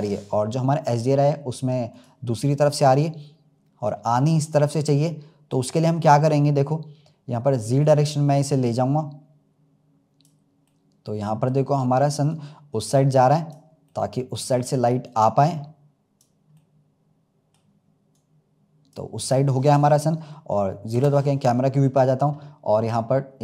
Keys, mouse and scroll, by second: 0.0-1.8 middle drag, 1.8 click, 2.3-2.8 scroll down 2, 2.8-6.4 middle drag, 6.4-7.8 scroll up 2, 7.8-10.6 drag, 10.6-12.2 middle drag, 12.2-13.8 drag, 13.8-15.0 middle drag, 15.0-16.5 drag, 16.5-18.0 middle drag, 18.0-20.8 drag, 20.8 KP_0, 21.8 scroll down 2.